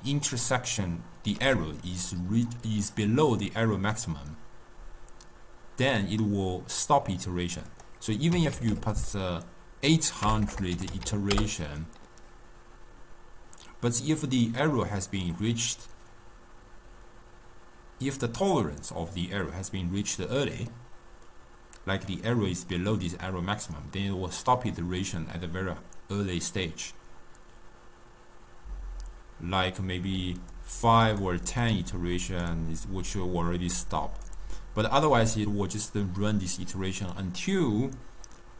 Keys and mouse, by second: 1.6 d, 7.8-8.8 drag, 8.8 0, 10.5 BackSpace, 10.6 BackSpace, 11.2 0, 30.2-36.0 typing, 30.7 click, 31.2 click, 31.7 click, 32.1 click, 34.4 right click.